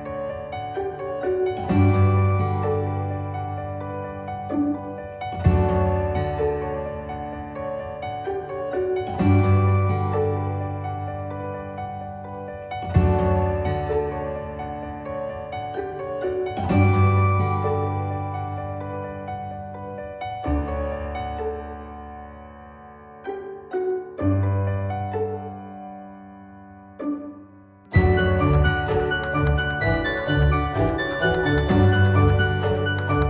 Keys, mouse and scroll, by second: 7.8-8.4 click.